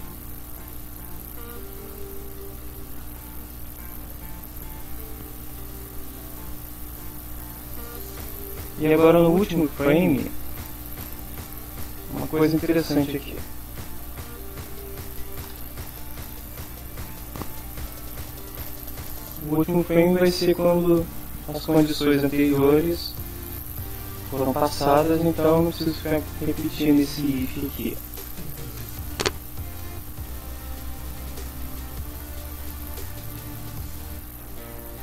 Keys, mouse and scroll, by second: 0.0-3.2 typing, 2.9 Right, 3.8 shift+Down, 9.5 Up, 13.9-15.6 typing, 16.1 Up, 16.4 End, 27.8 click, 29.0 click, 29.9 Return, 30.2 Tab, 30.4-35.0 typing.